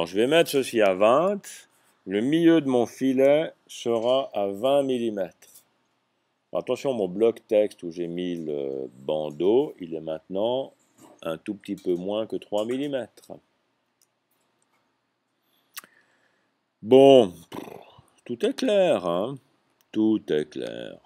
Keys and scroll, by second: 1.2 2, 2.3-3.2 typing.